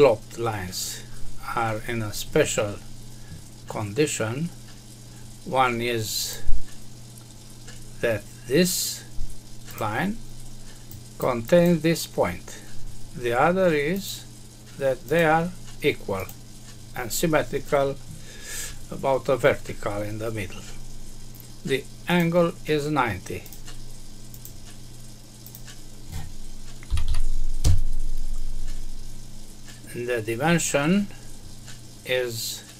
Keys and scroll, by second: 27.6 Return.